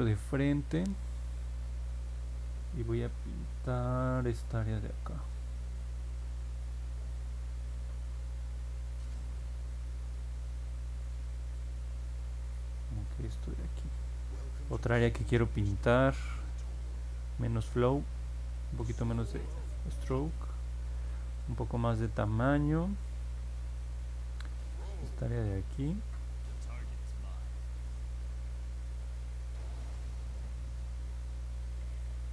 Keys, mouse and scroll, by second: 25.1 click, 25.9 click, 26.7 click, 27.4 click, 28.1 click, 28.6 click, 30.7 click, 31.3 click.